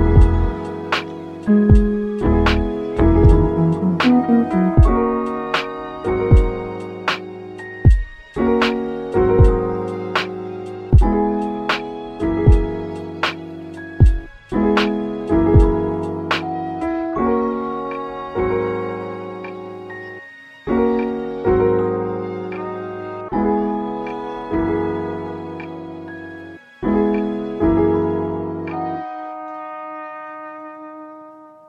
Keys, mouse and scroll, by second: 0.0 middle click, 1.0-1.7 scroll up 4, 1.7 middle click, 2.4 click, 2.7-4.1 shift+middle drag, 4.1-5.1 drag, 13.9 click, 14.9-17.2 drag, 17.2-18.2 scroll down 8, 17.7 click, 18.3-20.1 middle drag, 20.1 click, 20.9-21.9 scroll down 2, 21.9 scroll down 4, 22.0-25.7 drag.